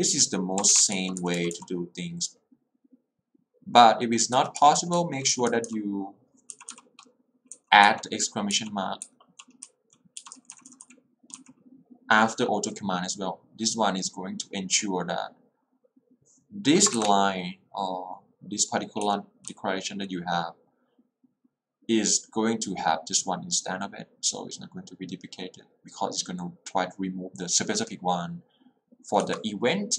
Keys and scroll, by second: 0.8-1.5 typing, 4.5 Escape, 4.7 k, 6.5 l, 8.0 h, 9.6-10.9 typing, 17.0 shift+`, 19.2 v, 19.5 l, 29.3 h.